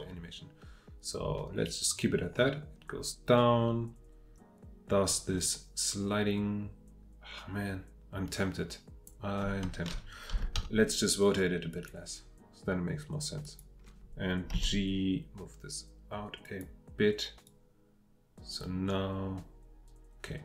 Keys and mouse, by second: 3.0-10.3 drag, 10.3 r, 10.5 x, 14.5 g, 17.5-20.4 drag.